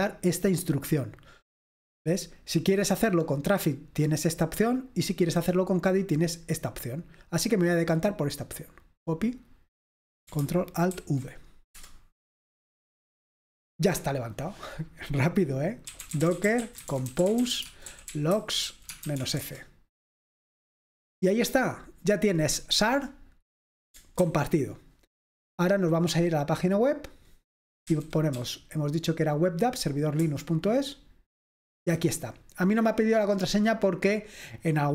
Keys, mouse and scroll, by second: 4.2-5.4 drag, 6.4 click, 7.5-8.9 drag, 8.9 right click, 9.3-10.3 drag, 11.0 ctrl+alt+v, 11.8 Return, 15.7-19.7 typing, 24.3 ctrl+c, 27.1 click, 28.0-28.5 typing, 30.4 Return.